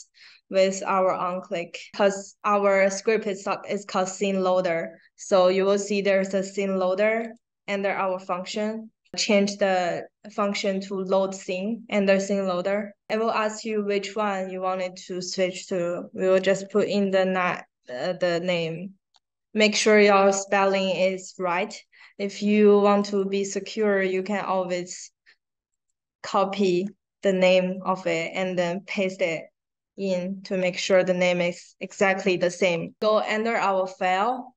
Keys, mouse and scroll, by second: 7.1 click, 13.0 click, 18.0-19.6 typing, 20.3 click, 21.5 click, 22.8 click, 23.0 click, 24.0 right click, 25.6 click, 27.1 click, 28.1 click, 28.9 click, 30.7 click.